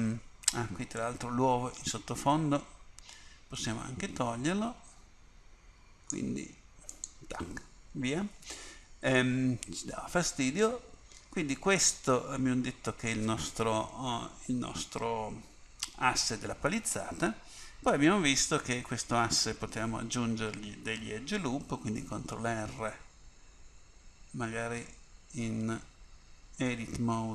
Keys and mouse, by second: 1.1-3.1 drag, 7.0-9.3 drag, 9.4-10.6 middle drag, 13.8 KP_1, 22.3 ctrl+r, 26.0 Tab.